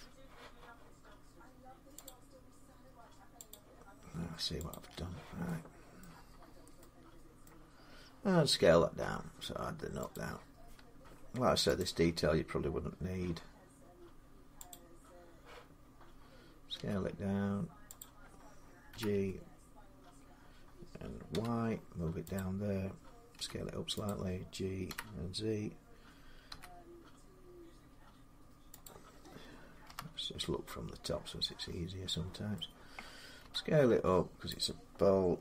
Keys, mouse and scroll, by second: 0.2 middle click, 1.8 click, 3.3 click, 4.5 click, 5.8 middle click, 6.0-6.5 scroll, 7.2 middle click, 10.0 click, 10.8 Tab, 11.6 click, 14.5 click, 16.5 s, 17.8 click, 18.7 g, 21.1 y, 22.0-26.2 drag, 23.1 s, 24.7 g, 26.3 z, 28.9-32.3 drag, 29.6 7, 32.3 middle click, 33.2 s, 34.4 click, 35.2 g.